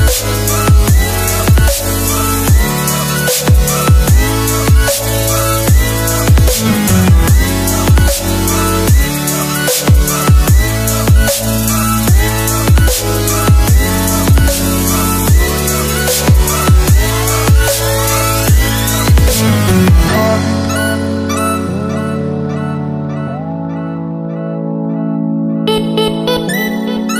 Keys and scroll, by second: 23.5 Down.